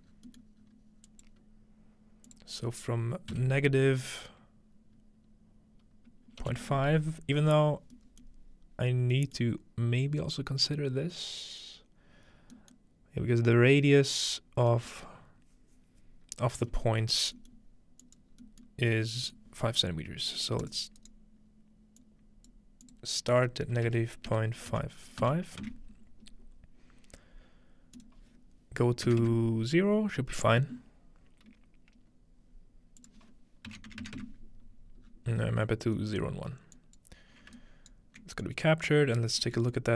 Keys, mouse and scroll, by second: 0.1 scroll down 2, 0.6 scroll up 2, 2.0-2.4 scroll up 1, 3.6 -, 7.5-8.1 scroll down 2, 8.3-10.6 middle drag, 8.8 scroll up 2, 10.3-11.4 scroll up 3, 11.4-12.3 scroll up 1, 12.3-14.1 scroll down 2, 14.1-16.7 scroll down 2, 17.0-18.3 scroll up 2, 18.0-19.4 drag, 18.3-18.6 scroll down 2, 18.9 scroll up 1, 20.4-24.1 drag, 21.0-22.0 right drag, 28.0-29.9 drag, 33.0-35.0 drag, 35.1-36.0 scroll down 2, 36.0-37.9 middle drag, 36.2 scroll up 2, 36.8-38.4 drag, 37.6-39.8 alt+right drag, 37.9-38.2 scroll up 1, 38.7-39.8 drag, 39.1-39.9 scroll down 1.